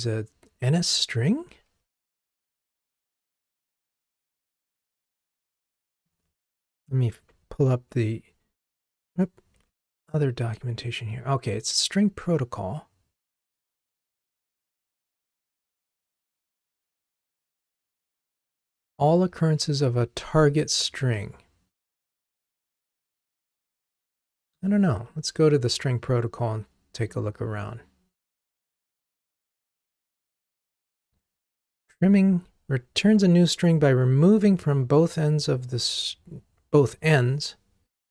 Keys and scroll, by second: 9.6 F1, 24.6 super+b, 24.9 super+b.